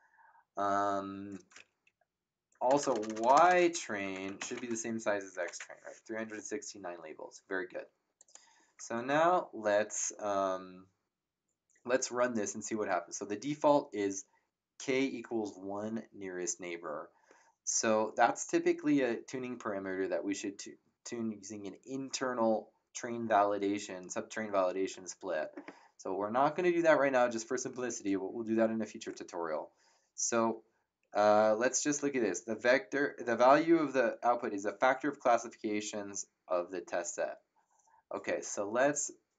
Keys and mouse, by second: 1.8 Up, 2.6-5.3 typing, 5.4 Return, 5.4 KP_Enter, 8.1 click.